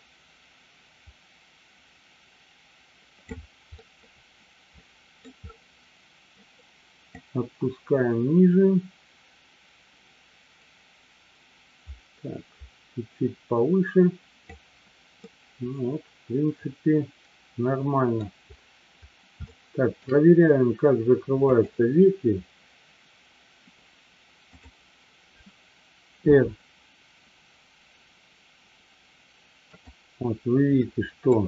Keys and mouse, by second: 3.9-5.2 middle drag, 7.2-14.9 drag, 15.2-18.2 middle drag, 19.5-20.0 shift+middle drag, 21.5 click, 30.1 click, 30.9 middle click.